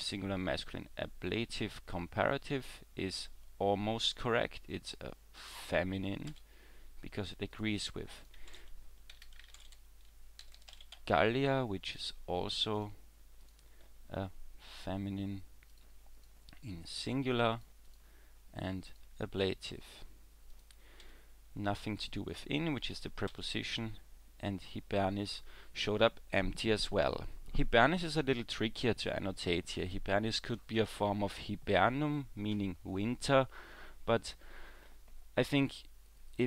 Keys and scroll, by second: 6.3 w, 21.1 w, 22.6 w, 23.3 w.